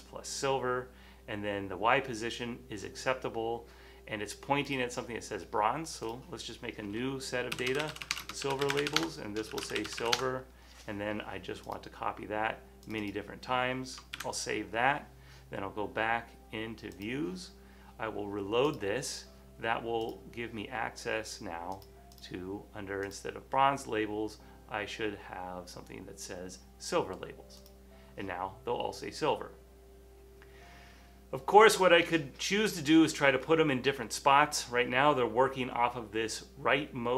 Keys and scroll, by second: 7.5-10.3 typing, 12.7-13.5 typing, 14.2 super+s, 14.3 super+s.